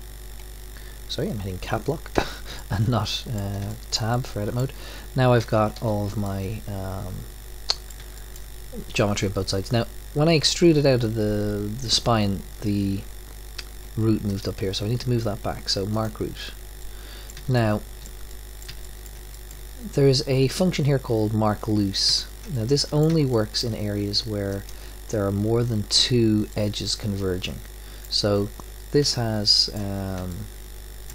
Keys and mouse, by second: 2.1 Tab, 5.4 a, 6.2 a, 16.0-17.7 drag, 17.7 middle click, 18.1 middle click, 19.6-21.3 middle drag, 25.0-26.5 drag, 30.8 middle click.